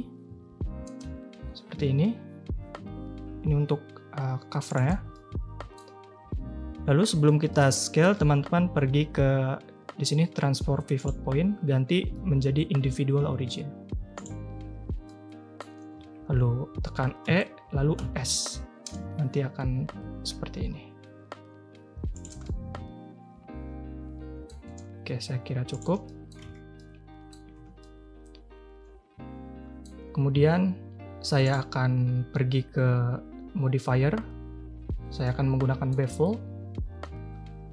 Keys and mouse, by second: 5.1-5.7 middle drag, 7.5 click, 11.0-14.2 drag, 15.0 click, 17.2 e, 22.4-24.4 drag, 24.6 s, 26.0 drag, 26.4 Tab, 26.7-27.3 drag, 27.4 a, 27.6 a, 27.8-29.8 drag, 31.4 click, 35.3-35.9 drag.